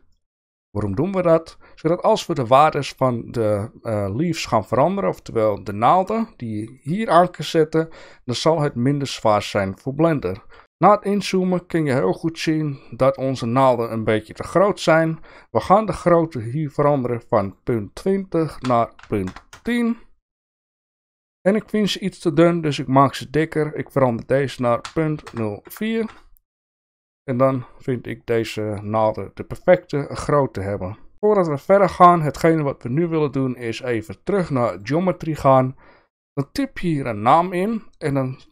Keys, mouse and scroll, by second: 0.1 shift+middle click, 8.6 shift+middle click, 10.2 shift+middle click, 10.6 shift+middle click, 17.4-20.8 drag, 22.7-27.1 drag, 28.8-30.0 shift+middle drag, 30.8-31.1 shift+middle drag, 33.6-34.8 drag.